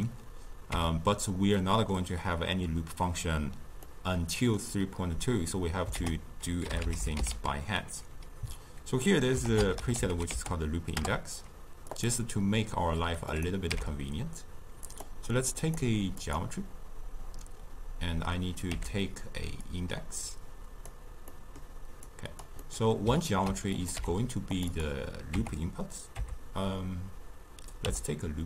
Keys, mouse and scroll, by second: 0.7 Tab, 1.5-6.0 middle drag, 6.0 ctrl+a, 10.0 o, 13.3 click, 13.7 n, 14.9 click, 15.7 drag, 16.2-18.8 drag, 18.8 n, 19.6-21.3 drag, 21.3-22.1 middle drag, 22.1 click, 22.7-23.8 middle drag, 23.8 click, 24.0 n, 24.6-27.8 drag.